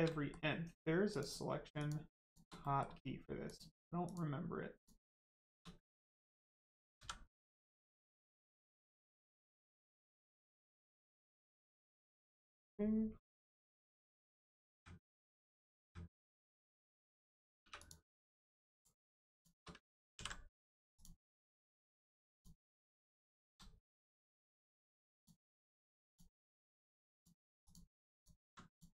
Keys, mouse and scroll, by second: 0.0 middle click, 0.1 middle click, 1.0 shift+click, 2.6 click, 2.6 middle click, 3.4 shift+click, 4.0 shift+click, 4.7 shift+click, 5.4 shift+click, 5.8 middle click, 6.9 x, 8.3 click, 8.6 shift+middle click, 9.0 middle click, 11.9 shift+middle click, 12.2 scroll down 1, 12.5 middle click, 14.7 a, 15.1 middle click, 15.5 scroll up 1, 15.8 a, 16.5 click, 16.9 middle click, 17.6 3, 17.7 click, 18.2 middle click, 18.7 click, 19.3 shift+click, 20.1 ctrl+e, 20.9 click, 21.4 middle click, 22.3 click, 22.7 middle click, 23.4 ctrl+z, 24.2 middle click, 25.1 shift+click, 27.1 ctrl+click, 27.6 click, 28.1 alt+click, 28.6 alt+click.